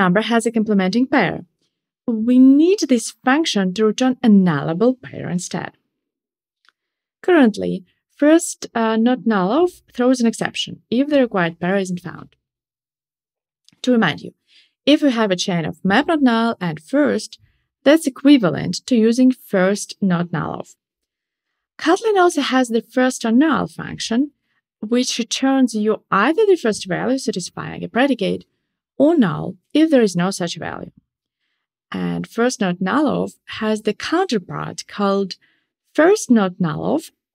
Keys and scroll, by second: 34.1 shift+super+z.